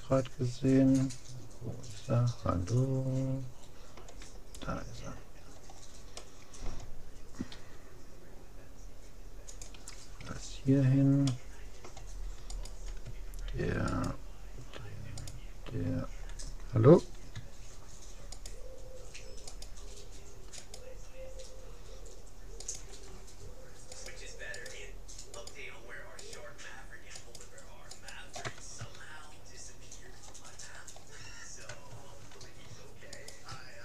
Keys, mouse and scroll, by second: 5.0-6.2 scroll up 1, 6.2 middle click, 7.0 click, 7.5 g, 10.4 a, 10.8-12.6 middle drag, 12.6-17.2 right drag, 18.4-22.2 right drag, 22.6-29.2 right drag, 29.2-32.6 middle drag, 29.4 right click, 33.2-33.8 right drag.